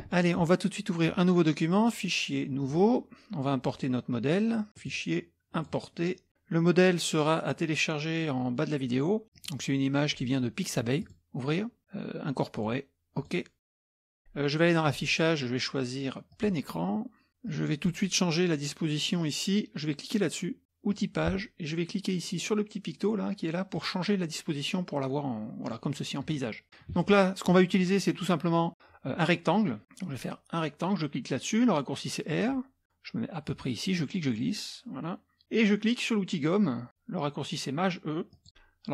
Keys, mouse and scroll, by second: 1.8 click, 2.6 click, 4.8 click, 5.6 click, 9.4 click, 11.0 click, 12.6 click, 13.6 click, 14.9 click, 16.3 click, 17.5 click, 20.9 click, 23.8 click, 25.7-26.8 scroll up 1, 26.8 scroll up 1, 32.3 click, 33.5-35.4 drag, 38.3 click.